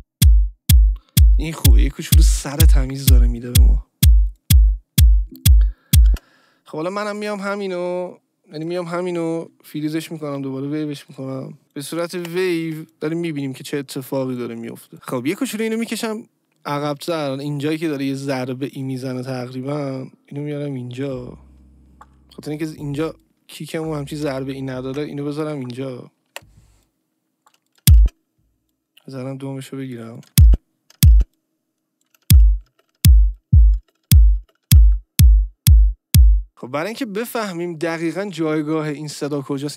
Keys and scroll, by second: 6.0 space, 11.6 ctrl+e, 12.1 Delete, 24.9 ctrl+e, 26.2 Delete, 27.8 space, 28.9 Delete, 30.2 space, 34.5 ctrl+d, 34.6 space, 36.5 space.